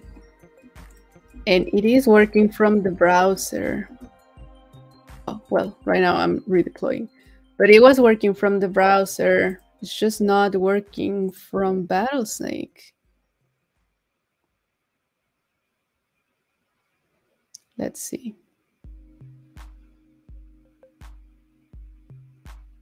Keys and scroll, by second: 1.4 super+a, 1.7 super+c, 2.4 super+t, 3.1 super+v.